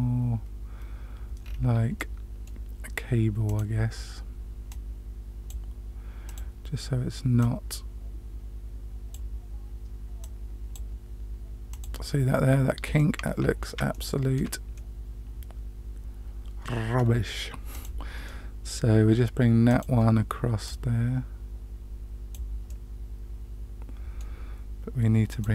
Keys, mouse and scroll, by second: 1.4 scroll down 1, 1.4-2.1 scroll up 2, 1.9-2.4 middle drag, 3.4 click, 4.6-5.4 drag, 6.2 click, 7.3-9.1 drag, 10.2 click, 11.6 click, 12.9-13.6 middle drag, 13.9-14.3 shift+middle drag, 14.7-16.9 middle drag, 17.7 click, 18.2-18.7 middle drag, 19.6 click, 20.6-22.3 drag, 22.6-24.2 middle drag, 25.2 click.